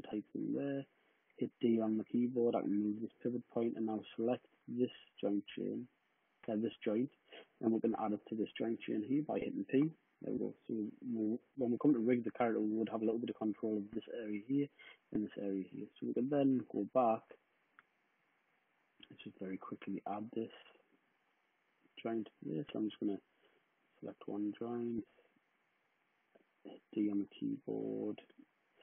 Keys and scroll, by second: 0.0 w, 1.0 d, 3.7 w, 9.5 p, 21.8 w, 24.3 space, 24.5 space, 26.5 d, 27.4 space, 28.2 space.